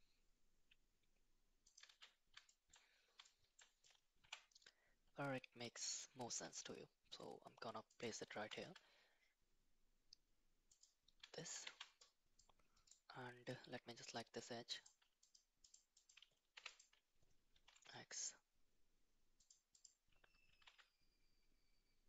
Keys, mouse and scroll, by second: 1.9 shift+z, 2.6 shift+middle click, 3.3 shift+middle click, 4.2 g, 8.4 s, 11.4 shift+middle click, 11.6 Tab, 12.4 click, 13.5 click, 14.8 click, 15.2 click, 15.7 click, 16.0 click, 16.6 2, 16.7 click, 17.5 g, 19.8 click, 20.5 g.